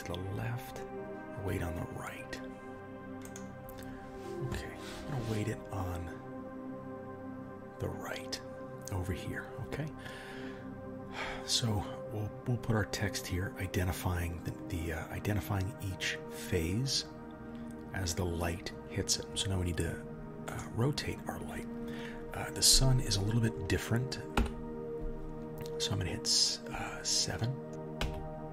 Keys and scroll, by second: 24.4 KP_7, 28.0 KP_1.